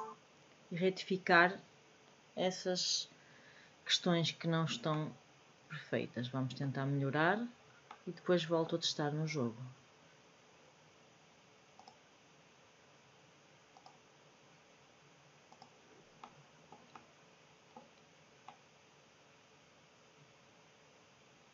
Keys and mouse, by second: 4.9-6.5 middle drag, 7.8-8.6 middle drag, 13.7 middle click, 16.6 middle click, 16.9 middle click, 18.5-21.5 middle drag.